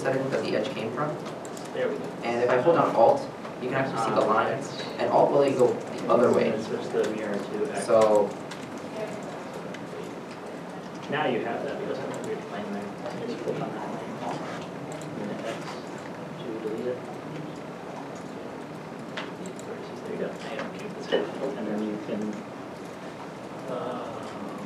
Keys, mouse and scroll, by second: 3.1 g, 8.1 alt+right click, 8.1 middle click, 8.9 g, 13.4 middle click, 15.8 g, 18.3 alt+click, 20.2 g, 20.4 g, 21.8 middle click.